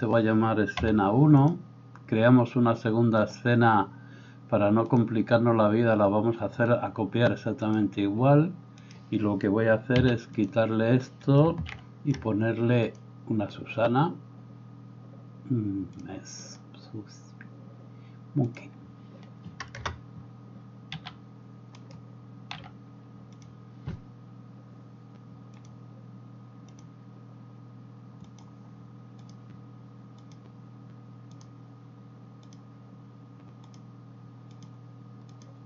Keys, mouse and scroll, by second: 3.3 click, 4.9-23.4 drag, 9.9 x, 11.7 shift+c, 19.7 KP_0, 20.9 s, 22.5 s, 25.6-28.4 drag, 29.4-30.4 drag, 32.4 click.